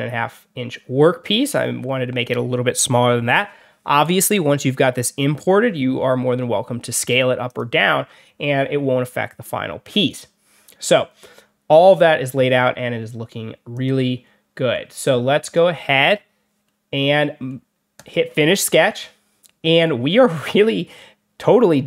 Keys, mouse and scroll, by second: 7.4 click, 13.6 click, 14.1 middle click, 14.9 click, 16.5 middle click, 17.9 click.